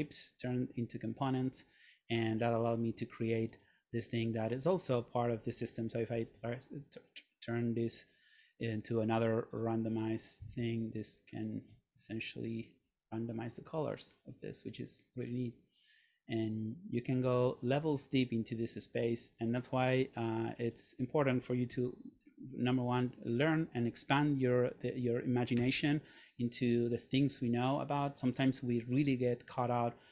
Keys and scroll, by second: 5.6 Return, 21.8 Return, 25.6 Return, 29.3 Return.